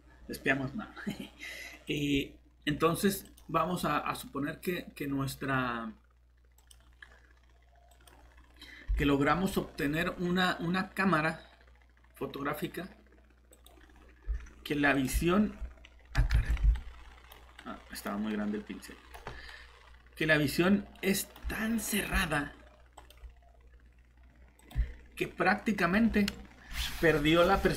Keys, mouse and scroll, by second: 9.3 scroll down 1, 9.4 typing, 9.6 scroll up 1, 13.6 click, 16.3 ctrl+z, 16.8 right click, 19.7 typing, 21.4-23.2 typing, 21.9 click.